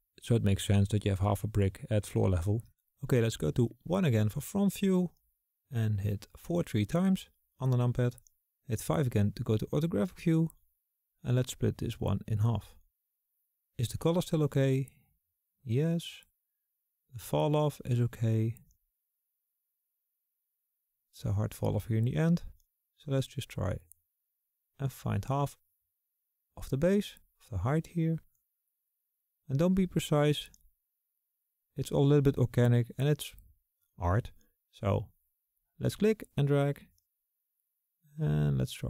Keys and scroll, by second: 5.0 KP_5, 7.4-8.9 typing.